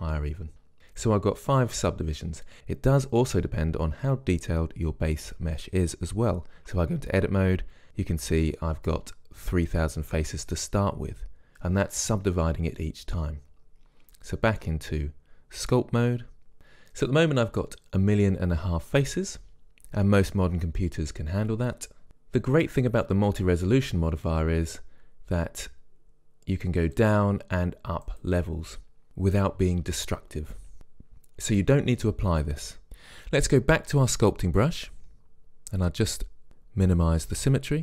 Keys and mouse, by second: 0.8 click, 6.8 Tab, 15.3 Tab, 27.1-29.1 drag, 37.0-37.8 drag.